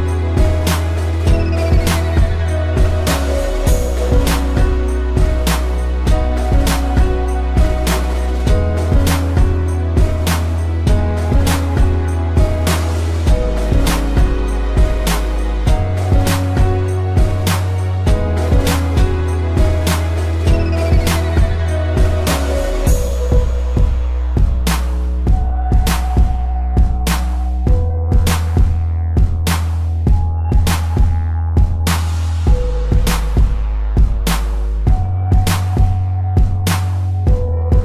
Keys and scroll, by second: 1.7 space, 7.0 ctrl+0, 13.4 z, 15.8 space, 17.8 p, 26.6 ctrl+0, 27.3 z, 28.0 space, 37.5 ctrl+z.